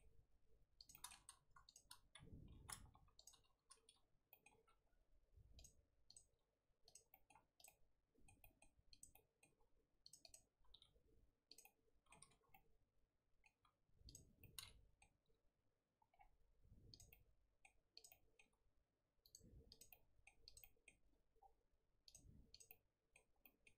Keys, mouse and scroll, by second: 0.0 g, 0.9 middle click, 1.6 shift+click, 2.4 j, 2.9 1, 3.1 click, 4.3 middle click, 4.5 g, 6.0 click, 6.2 g, 7.1 middle click, 7.5 click, 7.6-8.9 middle drag, 8.9 click, 9.1 middle click, 9.4 g, 10.2 click, 10.5 g, 11.6 middle click, 12.2 Tab, 12.4 scroll down 2, 12.5-13.5 middle drag, 13.5 Tab, 14.0 click, 14.4 middle click, 15.2 g, 17.1 middle click, 17.9 click, 18.0 middle click, 18.4 g, 19.6 click, 19.9 middle click, 20.4 click, 20.6 middle click, 21.1 g, 22.5 click, 22.6 middle click, 23.3 scroll up 1, 23.4 middle click.